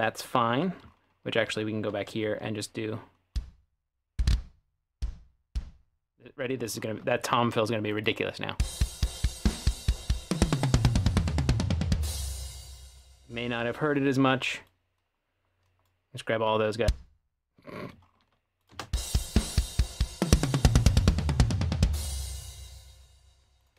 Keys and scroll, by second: 8.6 space, 12.2 space, 18.7 space, 22.1 space.